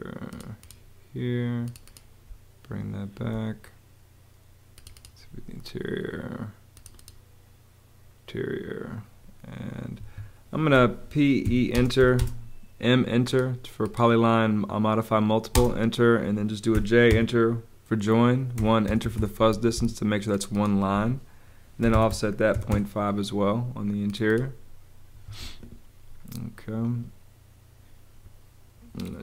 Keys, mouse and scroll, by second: 2.2 space, 9.9 Escape, 10.7-12.1 typing, 15.5 space, 16.7 j, 17.0 Return, 17.8 Return, 18.5 l, 18.8 Return, 19.4 ⟲, 20.9-22.9 typing, 25.0 ⟲.